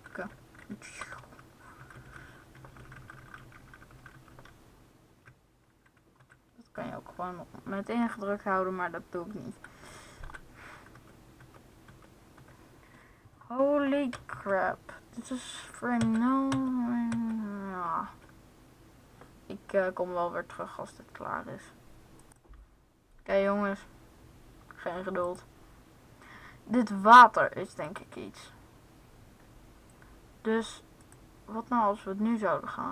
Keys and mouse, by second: 1.0 Left, 1.7 Left, 1.9-5.3 Left, 6.0 Left, 6.1 Right, 10.3 Right, 10.8 Left, 11.4 Left, 12.0 Left, 12.2 Right, 14.2 Left, 15.8 Right, 16.8 Right, 17.0 Right, 17.9 Left, 25.0-26.8 drag, 27.6-30.8 drag, 31.1-32.7 drag.